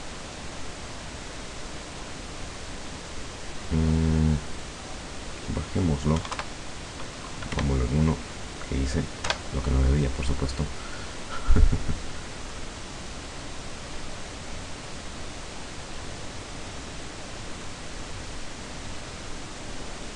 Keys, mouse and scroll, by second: 4.5 click, 6.2 KP_1, 6.4 KP_Enter, 7.6-8.0 scroll, 9.3 F12.